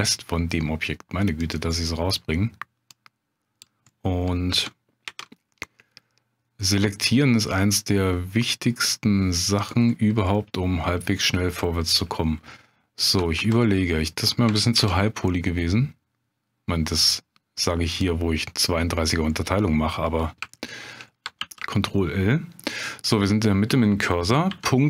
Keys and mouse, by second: 1.4 click, 1.7 middle click, 2.9 click, 3.9 middle click, 5.0 ctrl+b, 9.6 click, 10.3 middle click, 13.4 ctrl+z, 14.7 ctrl+b, 17.9 click, 20.6 shift+click, 21.4 ctrl+l.